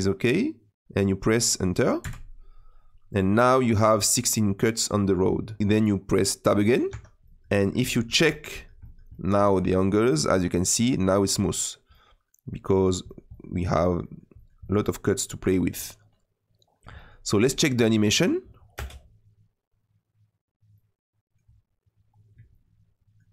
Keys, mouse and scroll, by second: 6.9 Tab, 7.2-17.8 middle drag, 17.8-18.7 scroll down 2, 18.7 space, 20.7-23.3 middle drag.